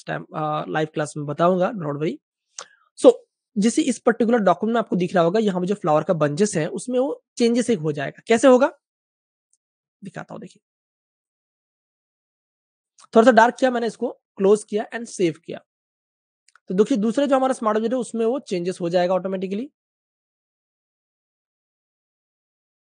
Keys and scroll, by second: 3.0 typing, 6.2 super+z.